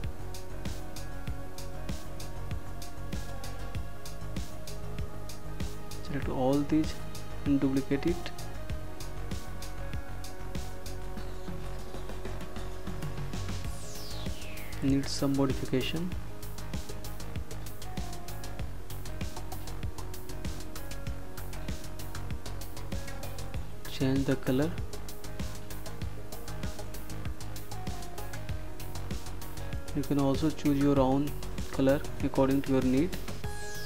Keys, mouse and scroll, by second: 0.5 click, 5.3 ctrl+d, 8.3 click, 10.7 Delete, 12.2 Delete, 17.7 click, 24.5 click, 29.4 click.